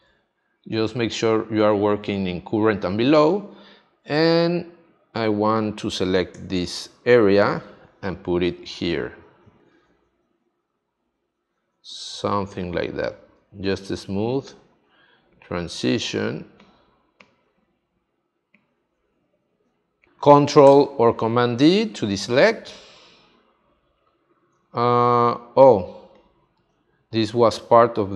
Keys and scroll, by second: 20.1 space, 21.4 super+d, 22.2 space, 25.8 space.